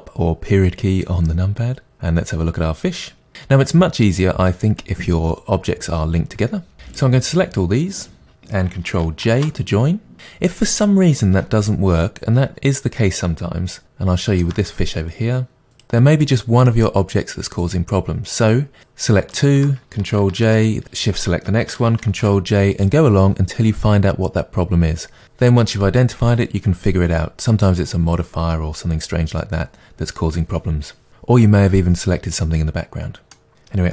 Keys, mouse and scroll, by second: 1.6 scroll down 2, 1.9-7.0 middle drag, 7.0 drag, 9.3 ctrl+j, 13.8-15.7 shift+middle drag, 15.7 click, 16.2 click, 16.6-16.9 drag, 19.3 shift+click, 20.4 ctrl+j, 20.8 shift+click, 22.1 ctrl+j, 22.8 middle drag, 31.1-31.4 scroll down 2, 33.3-33.9 middle drag.